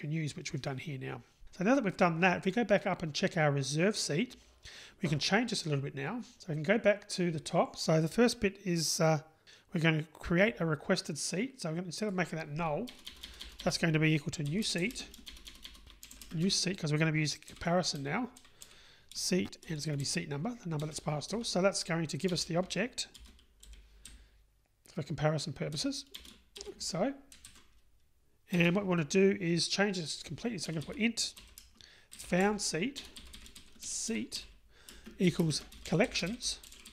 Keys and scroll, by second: 20.9 Return.